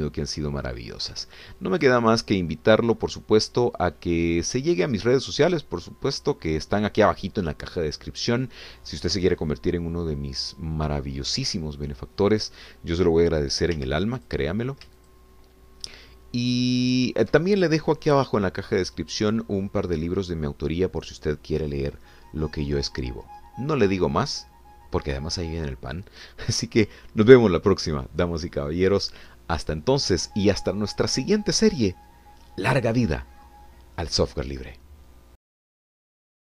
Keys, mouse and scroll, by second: 0.0 g, 2.8-6.4 drag, 6.4 scroll up 1, 6.5 scroll down 1, 7.2-7.7 scroll down 2, 11.2 scroll up 1, 12.0 scroll up 2, 12.5 shift+middle click, 14.7 3, 15.2 click, 16.0 shift+click.